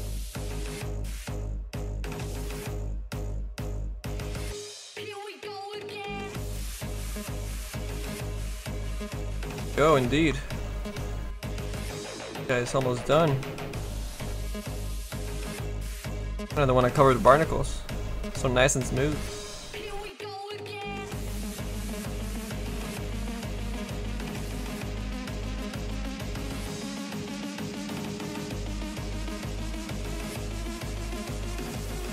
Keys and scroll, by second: 31.3 s, 32.0 s.